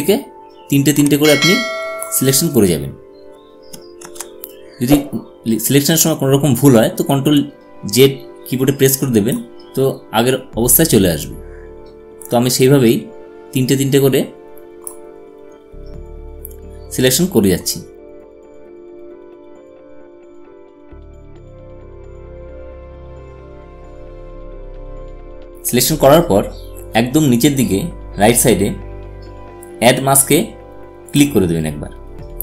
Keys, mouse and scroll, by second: 1.0-5.0 drag, 5.0 ctrl+z, 7.6-12.1 drag, 13.1-17.7 drag, 18.0-19.2 drag, 19.3-21.4 drag, 21.4 click, 22.6-26.4 drag, 32.0 click.